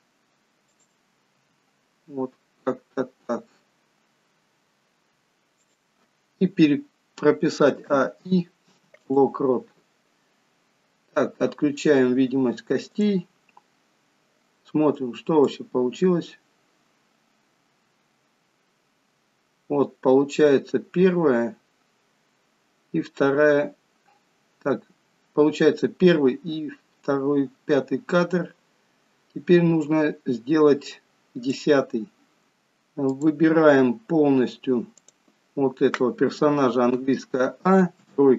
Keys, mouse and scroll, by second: 1.6 r, 7.7 a, 8.0 i, 13.1 click, 13.5-14.4 scroll down 5, 15.7 click, 33.3 click, 35.0 click, 37.0 a, 38.2 KP_3.